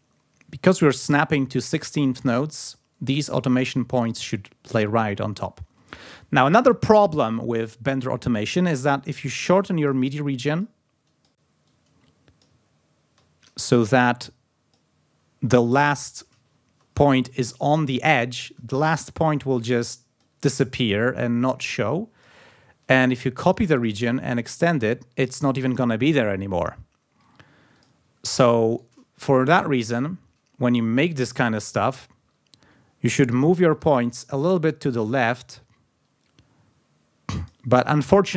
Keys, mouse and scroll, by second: 2.4-2.8 ctrl+scroll up 2, 3.1-3.5 ctrl+scroll up 2, 4.1-5.2 ctrl+scroll down 6, 5.4 ctrl+scroll up 2, 8.9 ctrl+g, 9.4 ctrl+scroll down 2, 9.8 ctrl+click, 10.1 ctrl+scroll down 2, 10.6 ctrl+click, 11.1 ctrl+click, 11.6 click, 12.6-13.2 ctrl+scroll up 4, 13.9-14.9 drag, 16.6 ctrl+scroll up 2, 18.1 ctrl+scroll down 2, 19.8 click, 21.6 click, 22.7 ctrl+scroll down 2, 23.1 ctrl+click, 24.3 click, 25.1 ctrl+scroll up 2, 26.8-27.7 ctrl+scroll down 2, 27.7 click, 28.7 shift+right click, 29.5-30.0 ctrl+scroll up 2, 31.2 click, 32.8-33.1 ctrl+scroll up 2, 33.5-37.6 shift+drag.